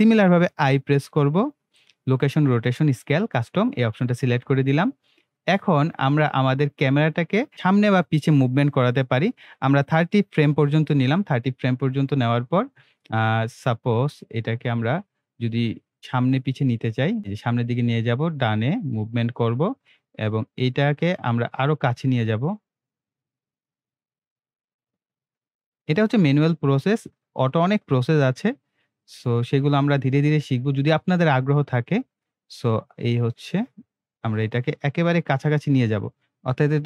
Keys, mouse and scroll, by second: 0.9 i, 2.6-5.5 drag, 10.0-36.8 drag.